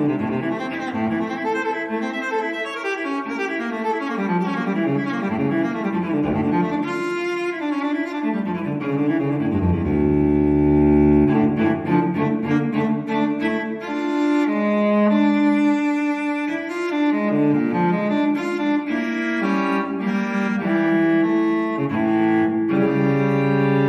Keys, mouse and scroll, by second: 2.2 0, 3.1-3.4 scroll down 1, 3.7-5.5 scroll up 1, 5.5-6.6 scroll down 2, 6.2 1, 7.6 2, 8.7 3, 9.8 4, 11.1 scroll down 1, 11.9 scroll up 1, 12.4 5, 13.4 6, 14.5 7, 15.5 0, 17.0 scroll down 1, 17.8 scroll down 2, 18.7 scroll down 2, 21.0-22.7 drag.